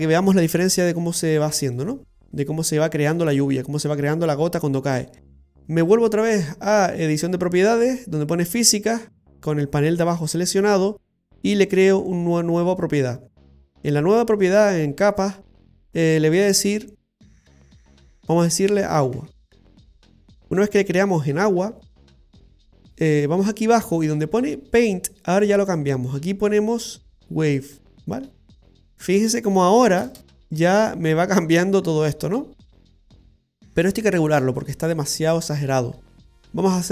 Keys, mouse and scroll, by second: 0.6 Tab, 1.4 shift+middle click, 1.9-2.4 scroll up 2, 2.4 shift+middle click, 8.4 click, 11.8 click, 17.7 click, 17.8 click, 18.2 BackSpace, 22.2-25.7 scroll down 7, 25.7 click, 30.2 space, 36.0-36.6 scroll down 1, 36.6-36.9 scroll down 3.